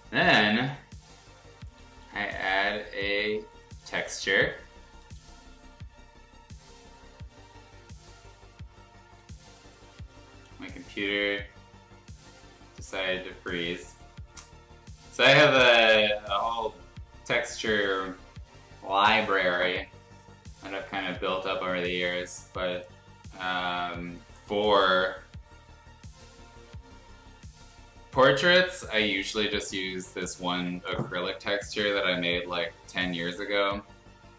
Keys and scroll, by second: 2.8 t, 3.0 e.